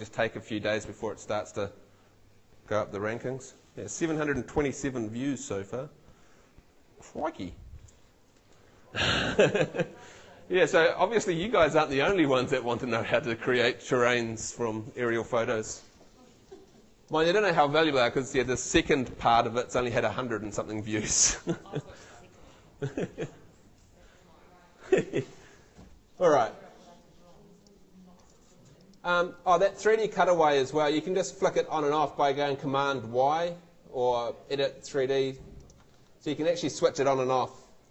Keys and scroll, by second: 37.5 super+y.